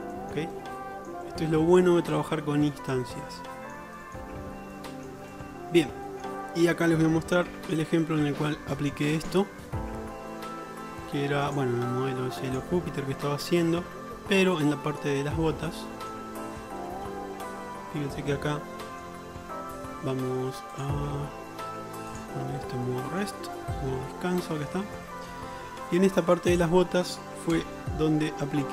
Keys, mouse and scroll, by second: 0.0 shift+middle click, 0.2 shift+click, 0.4 shift+middle click, 0.4 shift+click, 0.6 click, 0.8-2.3 middle drag, 1.9 click, 2.1 click, 2.3 click, 2.4 middle click, 2.6 shift+middle click, 3.5 middle click, 3.6 click, 4.8-6.9 shift+middle drag, 6.9 click, 7.6 Tab, 15.0-16.6 shift+drag, 18.8-19.2 shift+middle drag, 20.9-26.6 middle drag, 26.6 drag, 26.8-28.7 middle drag, 27.6 KP_Decimal.